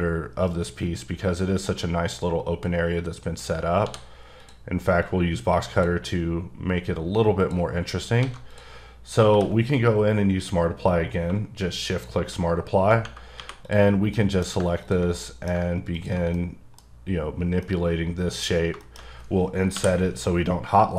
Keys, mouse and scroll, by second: 3.2 middle click, 3.8 d, 4.4 click, 5.0 click, 7.4 click, 7.7-8.2 scroll down 2, 8.2 alt+a, 8.5 click, 9.3 q, 11.3 shift+q, 11.7 shift+q, 11.9 shift+click, 12.6-13.4 scroll up 2, 13.4 3, 13.6 click, 14.1 middle click, 14.8 ctrl+click, 15.1 middle click, 15.9 ctrl+click, 16.3 middle click, 17.6 middle click, 18.5-19.7 scroll up 3, 18.8 shift+middle click.